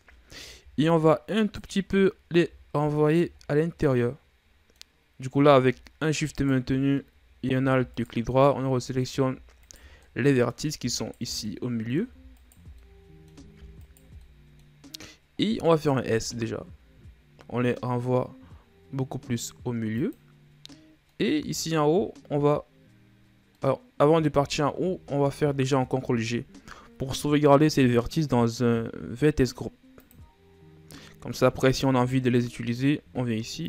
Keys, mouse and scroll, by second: 1.9 alt+right click, 3.5 alt+shift+right click, 3.9-4.3 scroll down 1, 4.3-5.7 middle drag, 5.7-6.9 scroll up 2, 6.9 alt+shift+right click, 7.5 middle click, 8.5 alt+shift+right click, 8.8-10.2 middle drag, 10.2 alt+shift+right click, 10.5-11.5 middle drag, 11.5 alt+shift+right click, 12.0 middle click, 12.9 alt+shift+right click, 13.3-14.4 middle drag, 14.4 alt+shift+right click, 14.7-16.6 middle drag, 16.6 s, 21.6 middle click, 22.4-24.1 scroll up 1, 24.1-25.1 middle drag, 25.1-26.4 shift+scroll up 1, 26.4 ctrl+g, 31.8-33.6 middle drag.